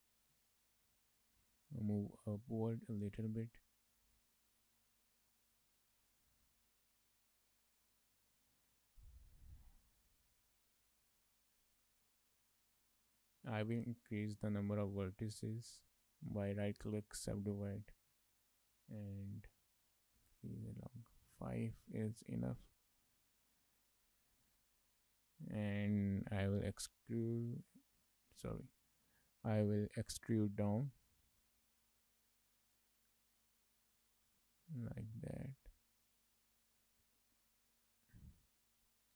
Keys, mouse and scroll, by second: 1.0 click, 2.0 click, 4.6 shift+middle click, 5.0 middle click, 5.7 shift+middle click, 5.9 middle click, 9.4 Tab, 10.4 shift+middle click, 10.7 middle click, 11.1 a, 12.0 2, 12.7 shift+middle click, 12.9 middle click, 16.1 right click, 19.4 click, 19.8 click, 20.3 click, 20.7 click, 22.1 Tab, 22.8 shift+middle click, 22.9 middle click, 24.1 Tab, 24.5 shift+middle click, 24.7 middle click, 25.0 a, 30.2 click, 34.4-34.7 scroll down 1, 34.7 middle click, 35.3 scroll down 2, 35.5 shift+middle click, 35.7 middle click, 37.4 Tab, 38.1 Tab, 38.8-39.1 scroll up 2.